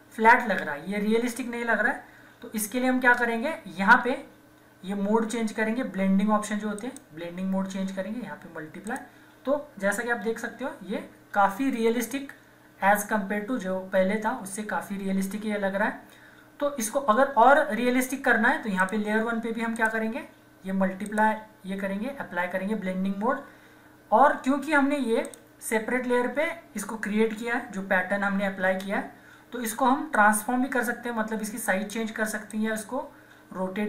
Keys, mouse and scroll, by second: 2.3 ctrl+-, 6.7 click, 10.4 ctrl+=, 18.8 click, 18.8 click, 25.2 click, 27.6 ctrl+-, 30.1-33.8 drag.